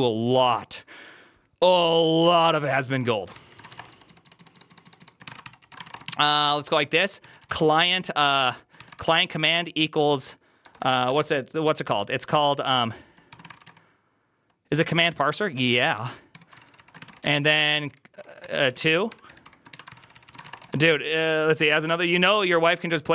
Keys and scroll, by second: 0.0-0.6 typing, 3.0-9.4 typing, 10.5-11.0 typing, 12.9-14.0 typing, 15.2-21.0 typing, 16.9 ctrl+c, 20.1 ctrl+c, 20.2 ctrl+:.